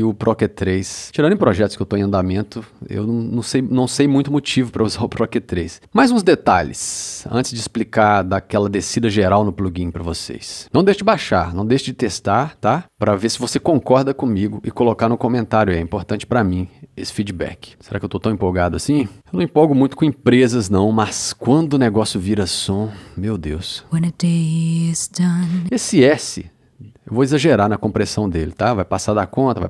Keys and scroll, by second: 9.3 2, 17.0 c, 23.6 space.